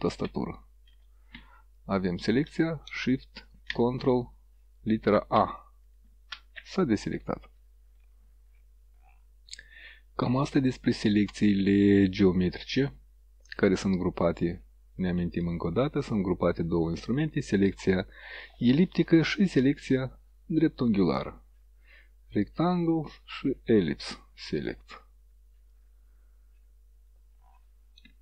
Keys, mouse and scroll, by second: 0.1 ctrl+shift+a, 1.9 click, 5.4 ctrl+shift+a, 15.3 right click, 25.8 click.